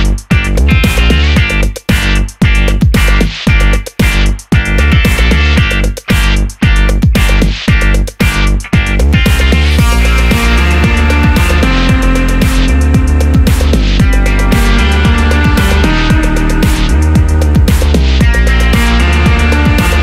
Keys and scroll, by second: 15.3 Tab.